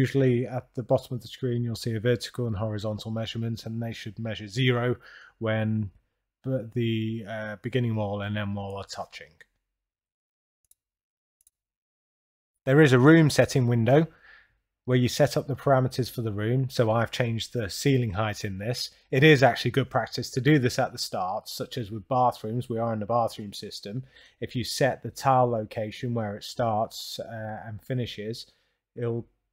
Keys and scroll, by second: 0.2 Return, 2.6 Return, 4.6 Return, 6.4 Return, 7.9 Return, 10.1 Return, 15.7 2, 16.4 6, 16.9 7, 18.2 Return, 23.8 Down, 24.6 Up, 27.6 s.